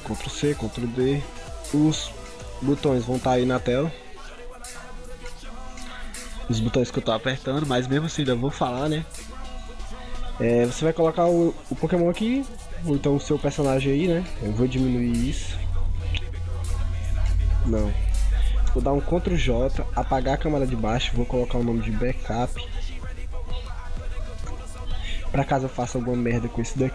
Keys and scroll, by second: 0.5 ctrl+d, 2.6 ctrl+v, 11.2 ctrl+t, 12.6 ctrl+0, 17.2 ctrl+z, 19.0 ctrl+j, 26.8 ctrl+t.